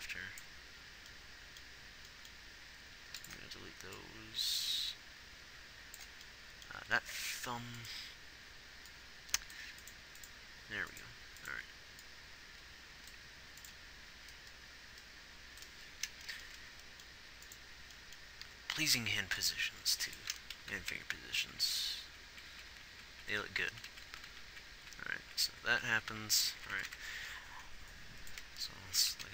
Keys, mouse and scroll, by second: 0.2 b, 2.8 r, 3.7 x, 7.1 z, 9.9-18.8 middle drag, 18.8 r, 20.0 r, 21.0-21.3 Left, 21.7-24.9 Right, 25.6 Right.